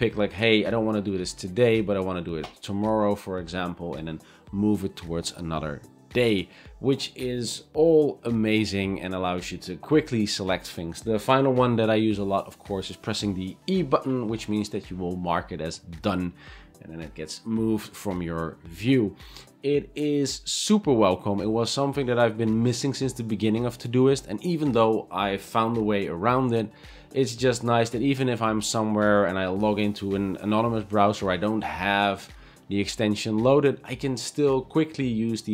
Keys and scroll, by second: 10.6 e.